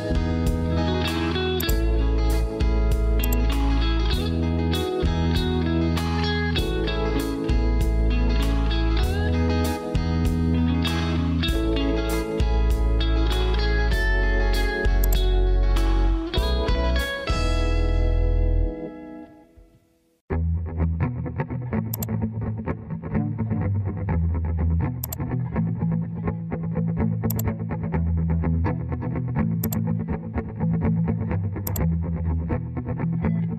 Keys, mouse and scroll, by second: 30.4 Escape.